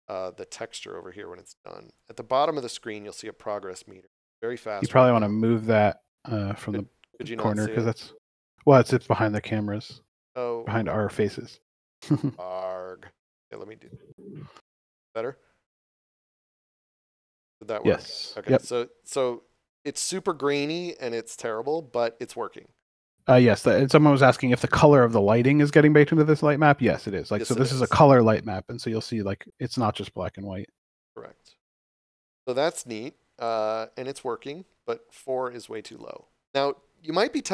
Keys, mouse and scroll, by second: 1.9 click, 13.5 click, 18.9 scroll up 1, 20.8 scroll down 1, 21.9 scroll up 1, 22.8 scroll down 1, 29.2 click, 35.6 click.